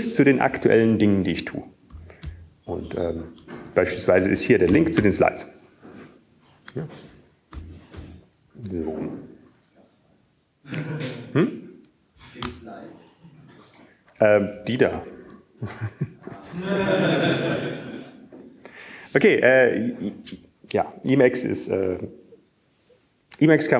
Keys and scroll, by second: 5.9 q, 7.3 Up, 8.8 Tab, 11.4 q, 16.2 Up, 18.7 super+Left, 20.7 typing.